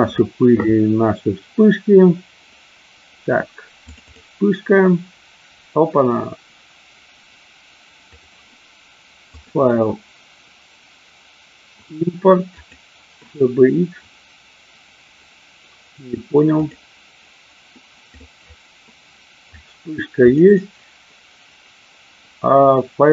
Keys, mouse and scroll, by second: 9.4-12.9 drag.